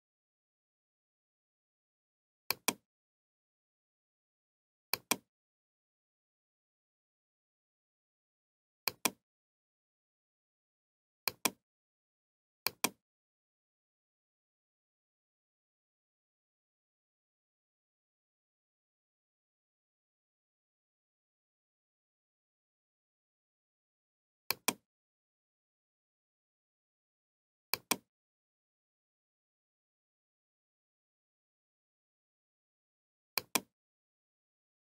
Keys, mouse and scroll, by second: 0.5-1.0 scroll, 4.2 click, 6.8 click, 8.6 ctrl+z, 10.8 click, 12.2 click, 15.0 click, 24.6-27.1 drag, 27.8 click, 29.0-31.4 typing, 29.9 click, 30.6 click, 30.8 click, 33.4 click, 33.4 typing, 34.9 click.